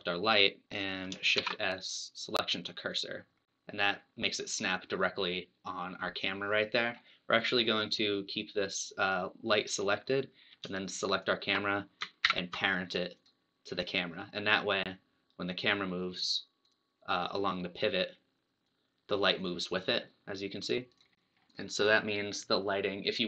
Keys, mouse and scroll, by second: 3.0 shift+s, 6.4-7.5 scroll up 3, 7.5-9.5 scroll down 1, 9.5-10.1 scroll down 1, 10.1-11.2 scroll down 1, 11.2 shift+click, 13.3 ctrl+p, 16.7 click, 18.8-21.0 drag.